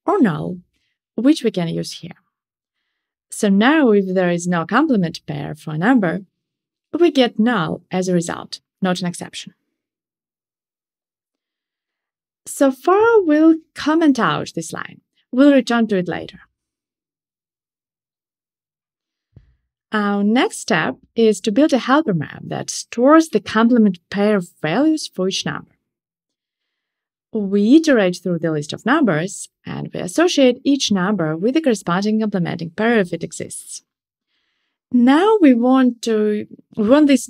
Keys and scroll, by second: 13.7 super+/, 26.8 Return, 33.7 Return.